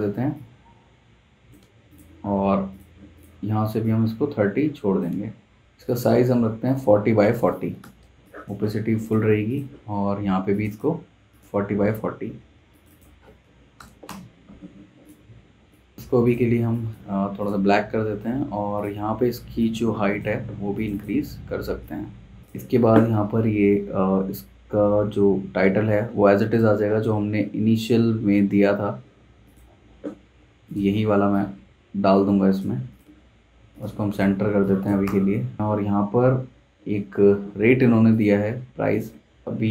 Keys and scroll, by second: 7.4-8.3 typing, 13.4-13.8 typing, 14.0 Return, 20.3 super+z, 34.3 z, 34.4 z, 35.0 v.